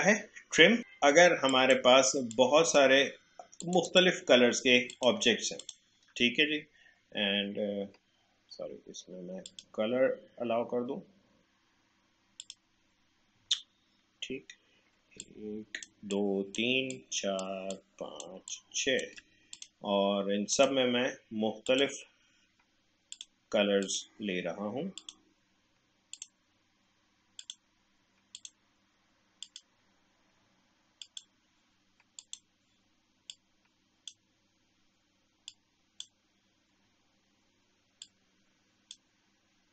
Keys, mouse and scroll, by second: 0.8-3.6 shift+drag, 9.5 click, 12.4 click, 15.2 click, 15.3-39.7 alt+drag.